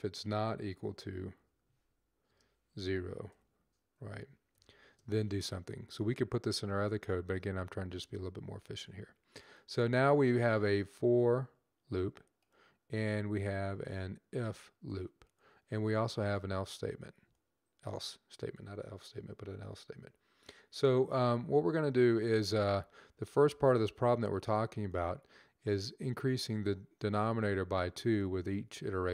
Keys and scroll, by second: 0.5-1.1 typing, 3.1 typing, 4.4 typing.